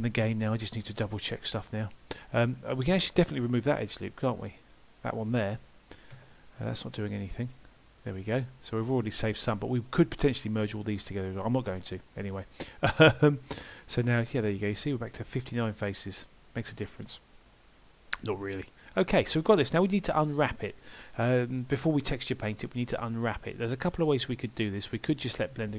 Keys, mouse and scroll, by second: 2.7 middle click, 3.8 alt+click, 5.4 middle click, 6.2 x, 8.2 middle click, 16.9 middle click, 17.6 scroll up 2, 17.8-18.4 scroll down 1, 18.5 shift+middle click, 25.3 middle click.